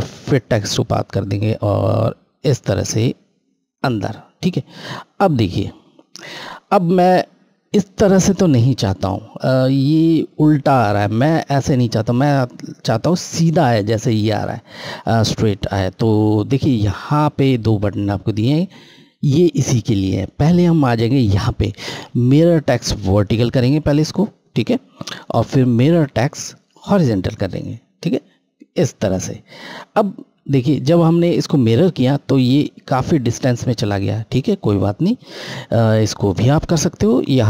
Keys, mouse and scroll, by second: 3.4 click, 4.3-4.6 scroll, 23.2 click, 27.2 click, 27.3 click, 31.7 scroll, 31.9-33.5 scroll up 1, 33.6 scroll down 1, 34.6 scroll up 1.